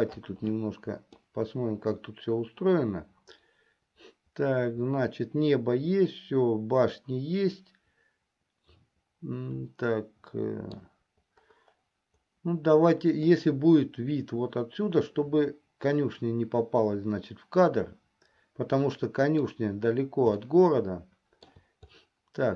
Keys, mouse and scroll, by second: 1.7-11.2 middle drag, 13.6-19.9 middle drag, 20.7-21.9 shift+middle drag.